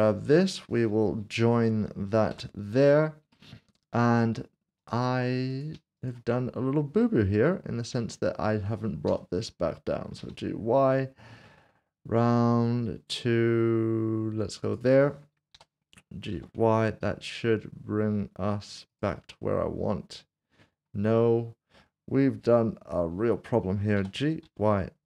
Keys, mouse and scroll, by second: 2.3 ctrl+j, 3.3 middle click, 4.8 click, 5.7 s, 6.0 shift+click, 7.3 scroll up 1, 8.1 shift+middle click, 10.2 typing, 14.6 click, 16.3 typing, 18.9 ctrl+click, 19.3 middle click, 22.6 typing, 24.0-24.4 typing.